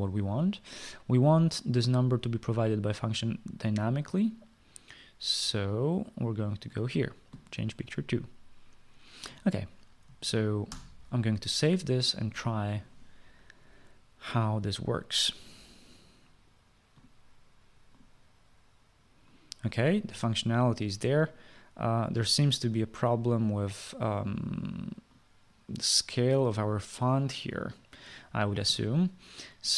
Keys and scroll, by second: 11.4 ctrl+s.